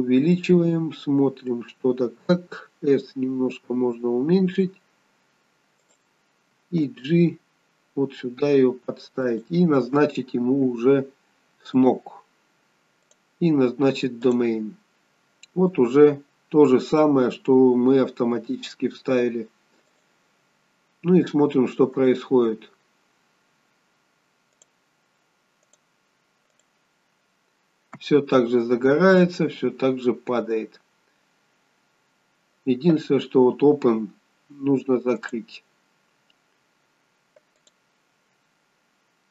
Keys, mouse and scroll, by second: 0.5 middle click, 0.5 scroll down 5, 2.9 s, 6.9 g, 11.8 click, 13.1 click, 15.0-15.7 scroll up 6, 15.5 middle click, 18.4 g, 22.0 click, 24.6 click, 25.7 click, 26.6 click, 33.5-35.3 scroll down 1, 35.3 click.